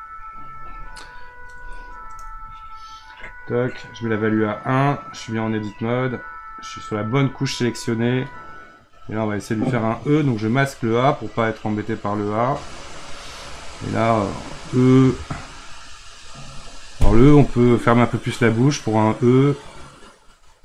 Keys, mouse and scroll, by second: 0.2 click, 3.8 click, 8.3-10.5 middle drag, 10.5 click, 12.8-20.6 drag.